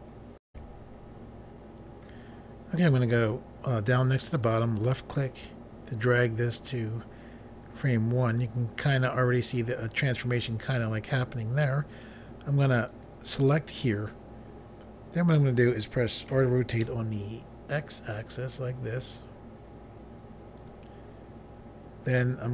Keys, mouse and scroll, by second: 0.5 Pause, 4.4 click, 9.6 scroll down 1, 12.9 click, 13.0 click, 16.3 r, 16.8 x, 20.5 click, 20.7 click.